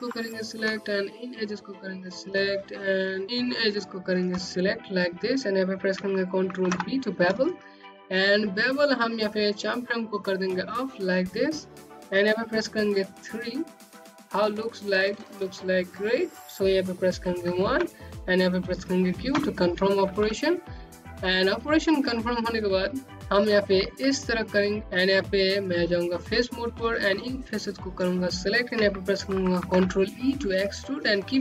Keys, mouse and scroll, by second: 0.3 click, 3.0 click, 5.0 ctrl+b, 8.6 click, 12.1 3, 15.9 typing, 17.7 typing, 18.3 scroll down 1, 18.7 click, 20.7-21.2 scroll up 1, 21.2-21.7 scroll down 1, 21.8 click, 23.1 alt+middle click, 24.8 right click, 25.0 click, 25.4 click, 26.4 click, 28.0 ctrl+e, 29.9 click.